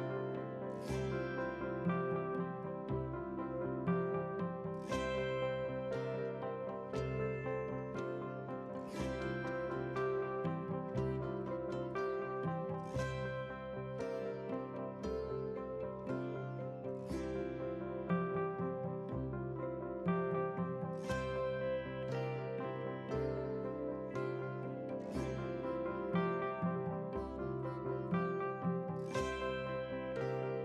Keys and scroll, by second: 13.9 ctrl+a, 22.4 ctrl+a.